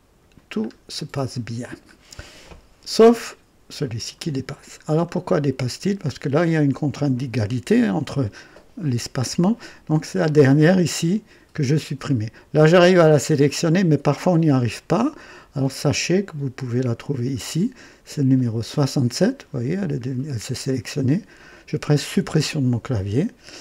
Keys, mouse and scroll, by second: 0.6 scroll up 1, 0.9 typing, 1.3-2.0 right drag, 2.3 scroll up 1, 3.8-4.7 right drag, 4.8-5.5 scroll down 1, 16.2-17.5 drag, 18.4 click, 22.1 Delete.